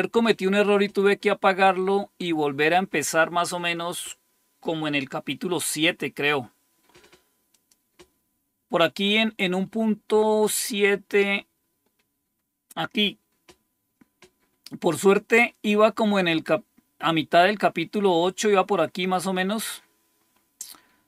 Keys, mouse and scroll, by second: 7.4 click, 9.0-12.1 scroll up 4, 16.5-17.2 scroll down 1, 20.2-21.0 scroll up 2.